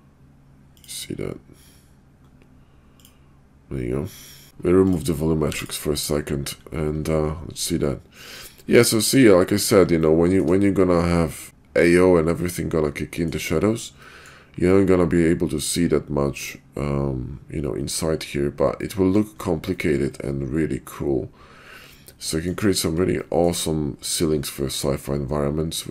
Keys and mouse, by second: 0.8-1.3 drag, 3.0 drag, 4.4 ctrl+z, 4.9 click, 5.5 x, 7.8-8.5 middle drag, 9.2-9.6 middle drag, 10.0-10.4 shift+middle drag, 11.5-13.3 middle drag, 14.0 middle click, 18.8 middle click, 19.7-22.5 middle drag, 23.2 shift+middle drag, 24.6-25.9 middle drag.